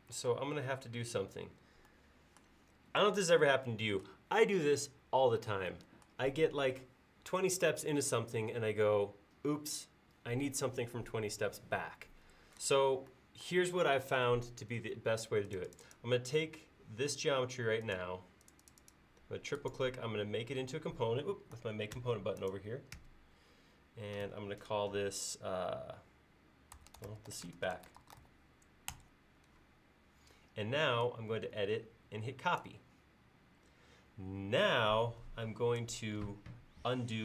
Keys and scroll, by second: 0.3 space, 22.0 g, 26.5-28.7 typing.